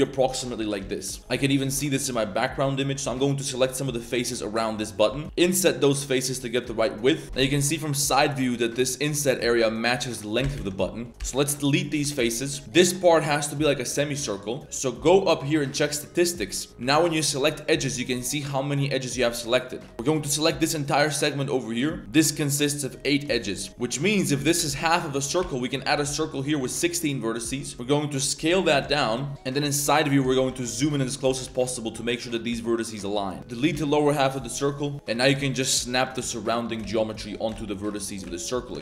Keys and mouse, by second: 0.0 drag, 0.6 KP_3, 0.8 z, 1.2 KP_3, 1.3 z, 3.0 c, 4.7 click, 5.1 z, 5.2 shift+s, 5.8 i, 7.5 e, 9.9 z, 10.6 ctrl+z, 10.8 click, 11.2 x, 12.1 shift+middle drag, 12.3 drag, 12.5 1, 14.3 shift+middle click, 15.2-16.5 drag, 16.8 2, 17.1 right click, 17.5 right click, 19.1 middle click, 19.5 middle click, 20.2 ctrl+click, 23.3 click, 23.6 1, 23.9 shift+click, 24.4 ctrl+z, 24.7 shift+middle drag, 25.4 shift+s, 25.6 click, 25.9 shift+a, 27.4 click, 27.7-31.4 typing, 30.1 shift+middle click, 30.9 shift+middle click, 32.0 shift+click, 32.5 s, 33.4 ctrl+z, 33.4 ctrl+click, 33.7 x, 34.9 ctrl+z, 34.9-38.8 typing, 35.1 click, 35.9 click, 36.6 click, 38.0 click, 38.6 click.